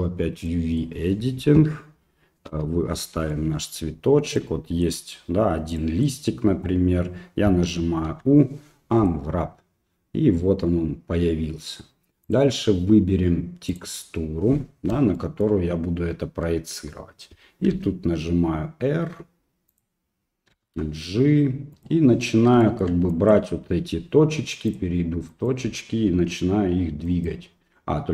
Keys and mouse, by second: 0.5 middle click, 2.5 KP_Divide, 3.3 middle click, 4.4 middle click, 5.8 middle click, 8.1 u, 12.4-13.8 drag, 15.1 shift+middle click, 17.7 r, 20.5 g, 22.7 shift+middle click, 23.3 click, 24.7 click, 27.2 click.